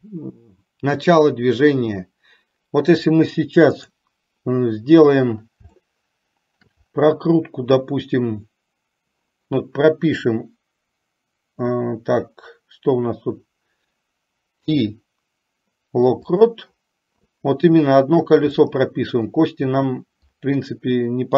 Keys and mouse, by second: 4.1 click, 6.1-6.8 shift+middle drag, 18.7 middle click.